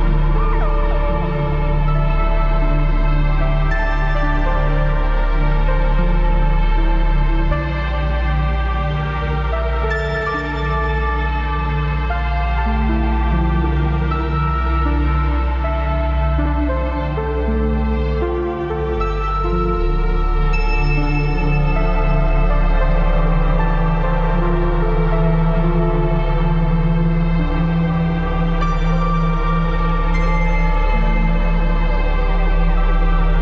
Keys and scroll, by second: 0.5 ctrl+KP_Subtract, 0.6 ctrl+KP_Add, 3.0-4.6 typing, 3.3 ctrl+KP_Add, 5.9-6.4 typing, 6.0 ctrl+KP_Subtract, 7.7 space, 9.9 ctrl+KP_Subtract, 10.3 ctrl+KP_Add, 11.6 ctrl+j, 11.9 ctrl+alt+g, 12.2 ctrl+z, 15.5 alt+Delete, 18.9 ctrl+KP_Subtract, 20.0 ctrl+j, 20.9 alt+Delete, 21.1 ctrl+d, 21.8 ctrl+t, 22.4 Down, 30.0 ctrl+KP_Add, 30.8 ctrl+KP_Add, 31.0 space, 31.3 b, 32.3 typing.